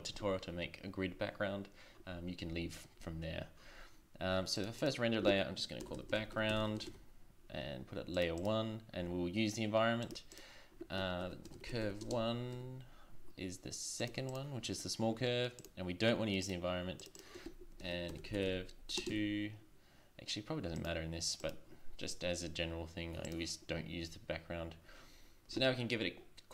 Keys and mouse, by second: 4.5-6.8 drag, 8.4-12.2 drag, 14.3-16.8 drag.